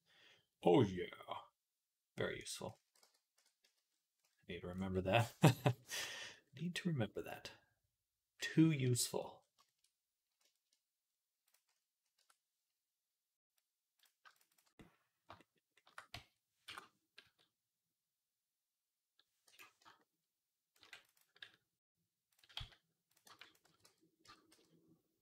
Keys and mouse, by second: 2.6 x, 3.2 Tab, 3.2-6.5 middle drag, 3.4 z, 4.5 click, 8.2-13.3 middle drag, 12.0 Tab, 13.3 click, 13.8-22.1 alt+shift+middle drag, 16.0 s, 17.1 s, 20.6 ctrl+r, 22.1 click, 22.4 z, 22.9-25.2 middle drag, 23.1 b, 23.5 x, 24.1 Tab, 24.3 z.